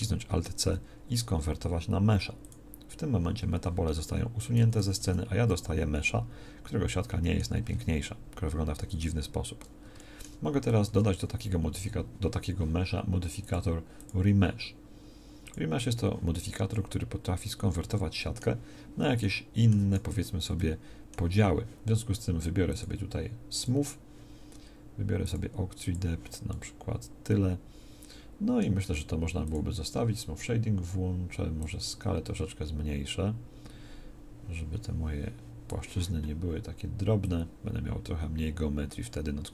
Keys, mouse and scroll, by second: 4.0 Tab, 4.7 a, 5.1 z, 10.8 Tab.